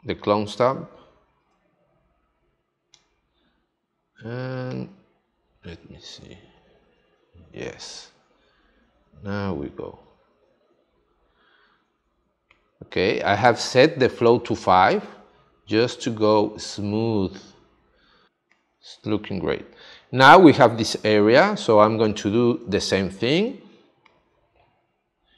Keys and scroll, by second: 18.3 space, 22.6 space.